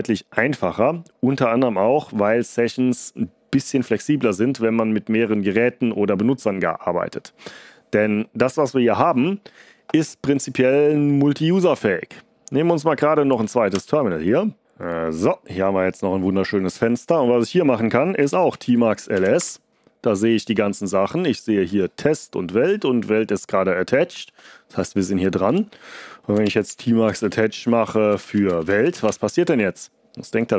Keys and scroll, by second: 13.7 super+Return, 18.0-19.7 typing, 26.1-29.5 typing.